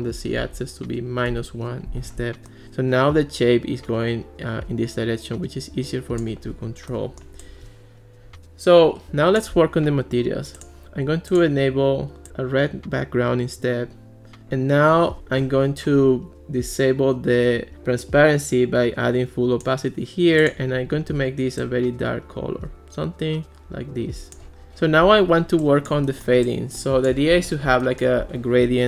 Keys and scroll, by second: 0.0-0.9 typing, 1.3 Return, 15.2 Escape.